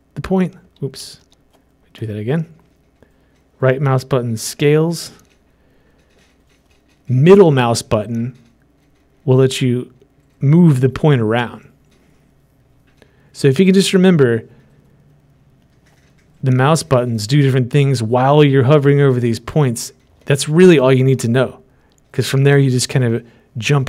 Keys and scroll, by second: 1.5 ctrl+z.